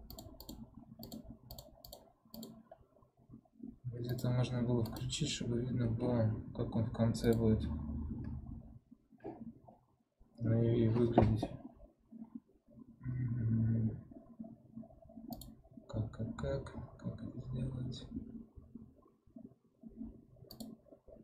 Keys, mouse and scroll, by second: 15.3-21.2 drag.